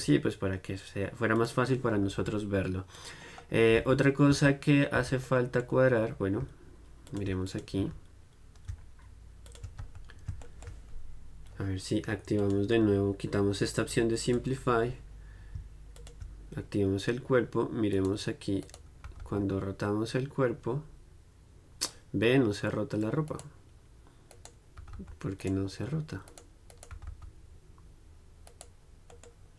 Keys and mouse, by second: 3.1 click, 4.4 z, 7.2 click, 7.9 z, 9.6 click, 9.9 z, 10.6-12.5 drag, 15.3-18.0 drag, 18.1-20.7 right drag, 23.7-28.9 right drag, 27.0 r, 29.2-29.5 right drag.